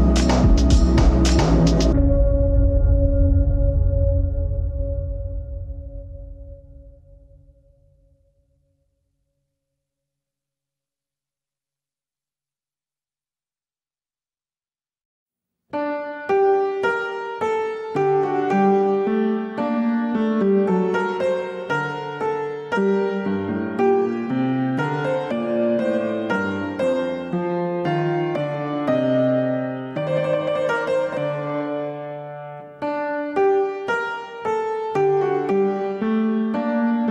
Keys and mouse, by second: 13.1 ctrl+r, 15.7 ctrl+r, 18.4 alt+shift+click, 21.5 g, 31.4-33.2 middle drag, 33.4-35.4 middle drag, 35.7-36.3 shift+middle drag, 36.7 click.